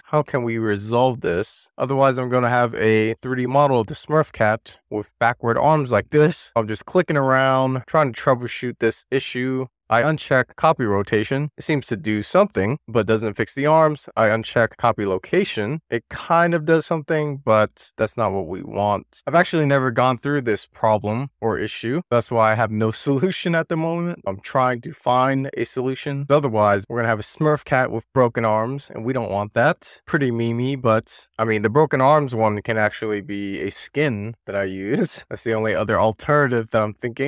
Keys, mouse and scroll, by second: 1.4-5.7 middle drag, 5.8 shift+middle click, 6.8 click, 8.1 click, 11.2 click, 12.2 click, 13.7 click, 14.6 click, 15.5 middle click, 16.2 shift+middle click, 16.7 middle click, 18.8 click, 19.5 click, 20.2-20.9 middle drag, 21.1 scroll down 1, 21.3-22.8 middle drag, 24.3 click, 24.8 click, 26.1 click, 31.1 click.